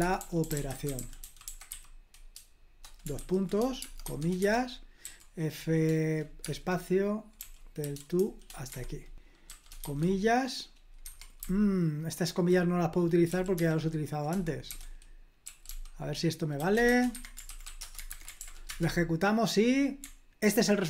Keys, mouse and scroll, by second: 0.0-2.1 typing, 3.7-5.0 typing, 6.4-9.8 typing, 8.7 Escape, 11.0 Escape, 11.4-13.6 typing, 14.7-18.0 typing, 17.1 Escape, 18.1 super+h, 18.4 ctrl+p, 18.7 Return.